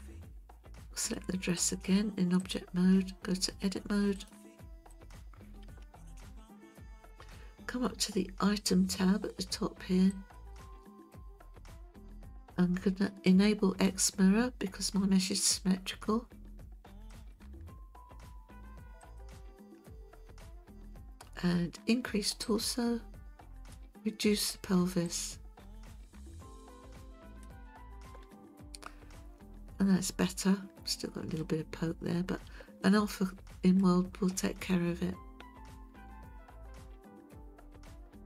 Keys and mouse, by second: 1.0 click, 4.2-5.1 drag, 6.0-7.0 shift+middle drag, 10.1 click, 11.8 ctrl+z, 17.1 click, 19.0 click, 22.5-23.7 drag, 25.2-27.4 drag, 28.3-31.4 middle drag, 32.8-33.8 middle drag.